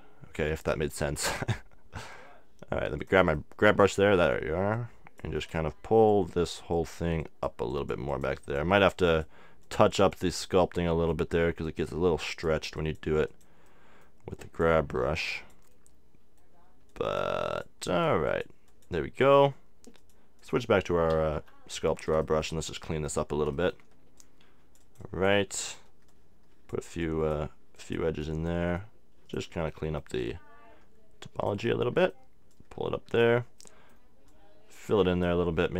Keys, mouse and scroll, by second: 3.4 middle click, 4.7-11.2 drag, 17.3-21.9 drag, 21.2 x, 21.4 x, 21.9-23.3 middle drag, 23.7 middle click, 24.2-25.2 drag, 28.0-32.0 drag, 28.2-31.9 middle drag.